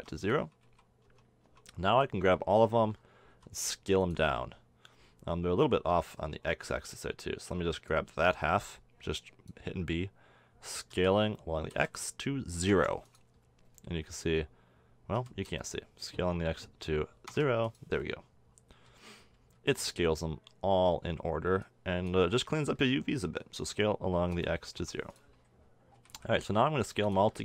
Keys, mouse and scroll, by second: 0.6 a, 1.1 Tab, 1.5 Tab, 1.9 a, 2.3-2.6 drag, 3.3 s, 5.6 a, 6.7 b, 10.9 s, 13.4-16.0 middle drag, 15.1 s, 18.9 a, 19.5 b, 19.7 click, 22.3-22.8 middle drag, 23.6 s, 25.3 middle click, 26.0 a, 26.1 a, 26.5 s.